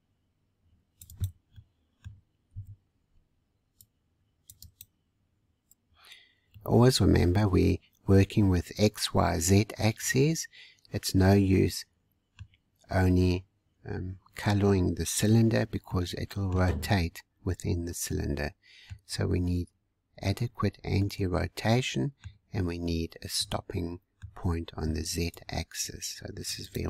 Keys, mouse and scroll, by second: 1.5 middle click, 2.5 c, 3.6 middle click, 6.5-9.5 middle drag, 12.5-12.9 scroll up 1, 15.9-22.9 middle drag, 22.9-23.3 scroll up 1, 23.3-24.3 middle drag, 24.3-24.7 scroll down 3, 24.7 c.